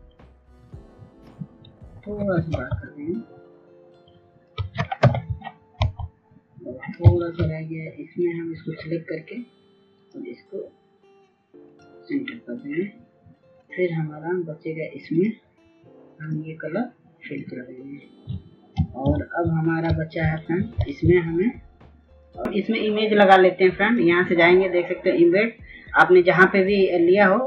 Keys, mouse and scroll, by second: 6.6 ctrl+t, 7.5 shift+click, 9.5 Return, 12.6 ctrl+click, 20.8 click, 27.4 click.